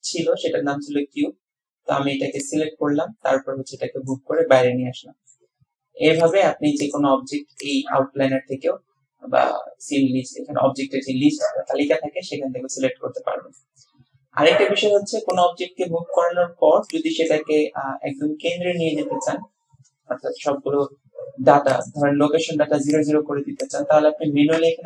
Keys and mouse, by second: 1.7 typing, 2.5-4.2 drag, 4.4-5.4 drag, 6.2 click, 7.6-8.5 drag, 13.6-15.1 drag, 15.3 click, 15.7-17.4 drag, 21.9-23.1 drag, 23.8-24.8 drag.